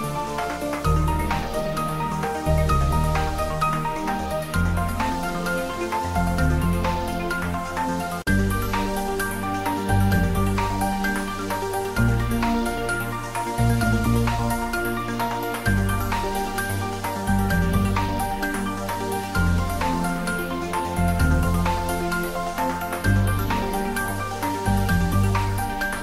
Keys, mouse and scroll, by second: 2.3 Tab, 4.1 click, 5.4 click, 6.3 scroll up 1, 6.8 middle click, 7.6-10.9 drag, 19.0-21.9 drag, 24.0-26.0 drag.